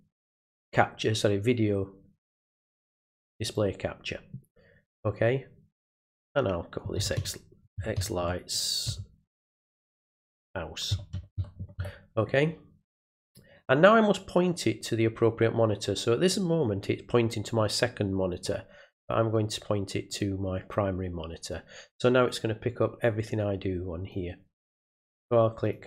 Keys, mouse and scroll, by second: 3.4 click, 13.2 click, 18.4 click, 20.1 click, 22.2-24.1 drag, 25.6 click.